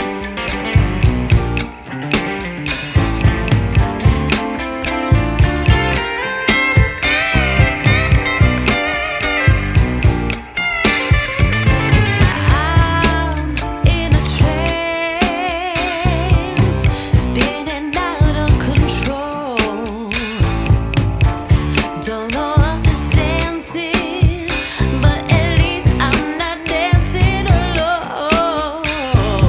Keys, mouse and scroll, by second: 0.8 t, 2.5 click, 3.5 click, 7.4 click, 8.3 click, 12.0 click, 14.6 click, 16.4 click, 20.0 click, 22.1 click, 27.3 click.